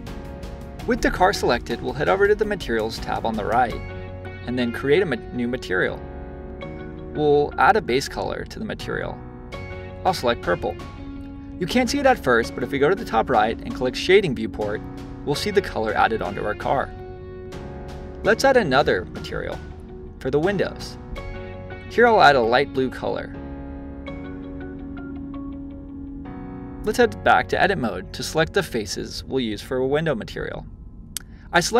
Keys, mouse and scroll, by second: 2.2 click, 5.7 click, 12.6 click, 16.6-20.2 drag, 25.7 click, 26.3-29.3 drag, 30.0 click.